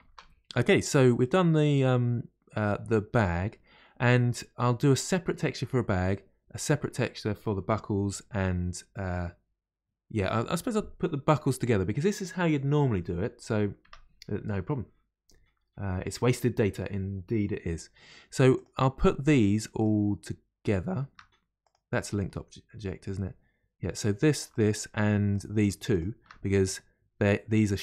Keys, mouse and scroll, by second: 0.0 ctrl+space, 3.6-3.9 scroll down 2, 19.0-19.7 scroll up 2.